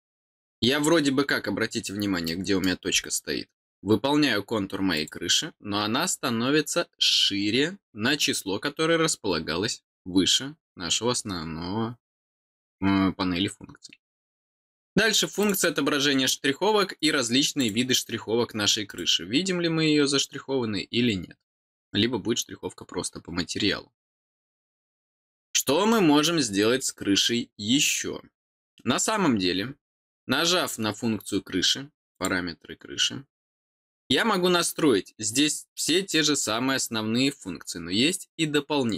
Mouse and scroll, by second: 1.4 scroll down 2, 2.2 middle click, 3.0 scroll down 2, 15.3 click, 16.9 click, 17.5 click, 18.8 click, 24.8 scroll down 2, 25.4 middle click, 25.9-26.2 scroll down 2, 26.7 middle click, 32.1 click.